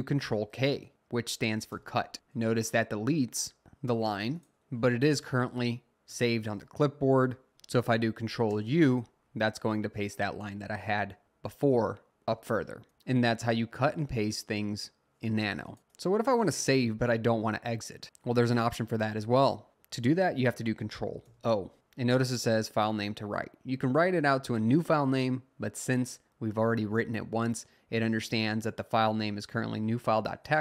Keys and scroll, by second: 1.7 k, 6.2 Up, 6.3 Up, 6.8 …, 7.5 Up, 8.5 u, 21.3 o.